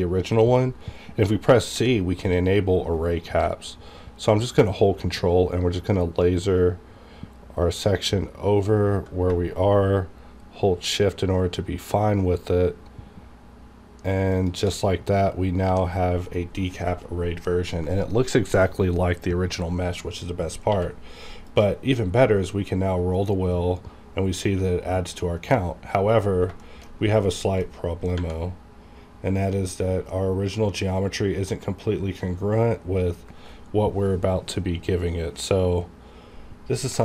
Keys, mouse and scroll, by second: 1.7 c, 14.3 ctrl+shift+click, 15.2-15.6 scroll down 1, 15.6 g, 16.2 right click, 16.2 right click, 20.7 q, 21.5 click, 21.9-22.3 scroll up 1, 23.0 scroll up 1, 23.4-23.8 scroll down 1, 24.3 scroll up 1, 25.3 right click, 25.4 right click, 25.7-26.3 scroll up 1, 26.6 shift+middle drag, 26.9-27.2 shift+scroll up 2, 27.6 shift+middle click, 27.8-28.2 scroll up 1, 28.5 scroll down 2, 29.1 scroll up 1, 29.5 scroll down 1, 30.8-31.1 scroll up 1, 36.7 scroll down 1, 36.9 shift+middle click.